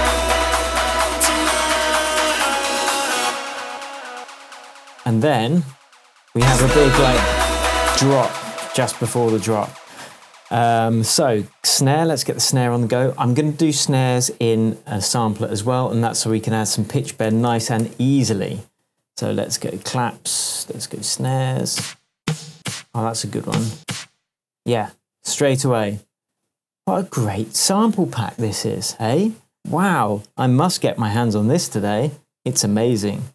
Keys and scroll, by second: 3.2 space, 3.8 BackSpace, 7.9 space, 9.7 super+s, 14.8 shift+super+t, 16.3 super+r, 16.9 shift+super+r, 17.0-18.1 typing, 19.8 Left, 21.0 Down, 21.3 Right, 21.6 Down, 22.5 Up, 23.4 Down, 23.7 Up.